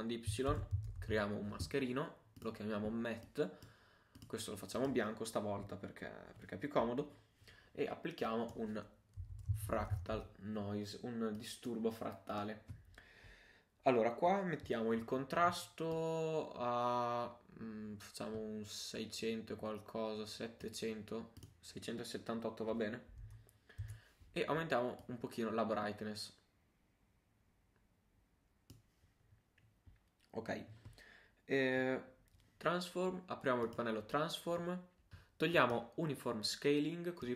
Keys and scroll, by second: 0.3 shift+super+y, 0.5 shift+super+m, 0.7 shift+a.